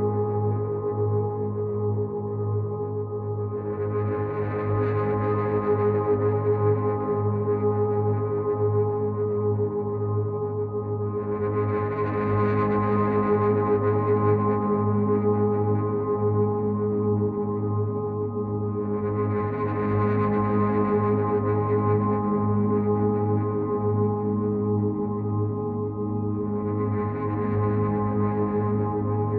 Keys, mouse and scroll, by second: 14.1 click, 15.8 click, 16.9 click, 21.6 alt+click, 23.4 click, 25.2 click.